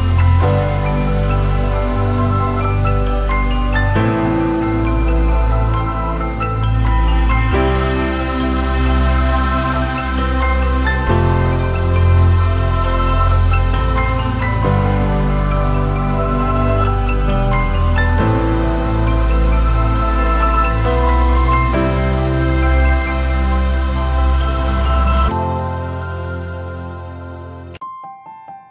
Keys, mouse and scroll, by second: 16.2 typing, 18.3 typing, 26.8-28.7 scroll up 1.